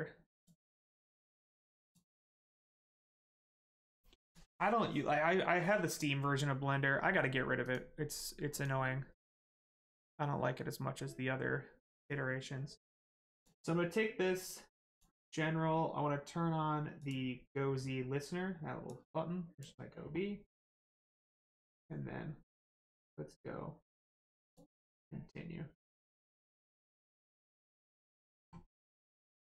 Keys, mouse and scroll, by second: 0.3 click, 3.9 click, 7.6 click, 12.0 click, 14.9 click, 17.0 click, 21.0 click, 24.4 click.